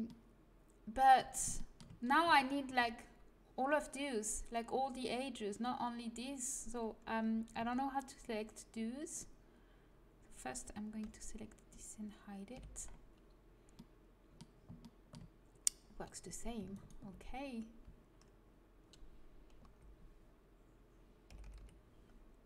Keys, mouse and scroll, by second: 0.0-6.3 middle drag, 7.2 middle click, 7.6 a, 11.1 l, 12.5 h, 13.7 middle click, 15.0 middle click, 19.6-21.5 l.